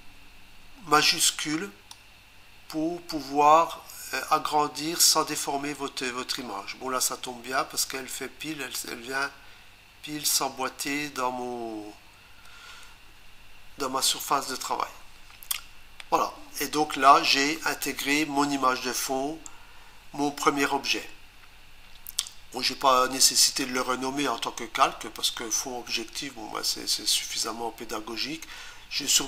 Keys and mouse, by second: 1.9 shift+click.